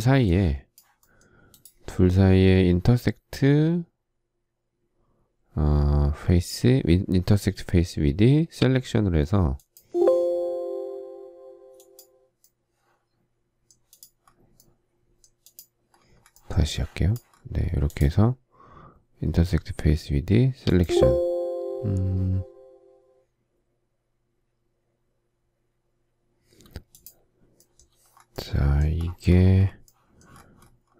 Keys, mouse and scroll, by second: 0.0 space.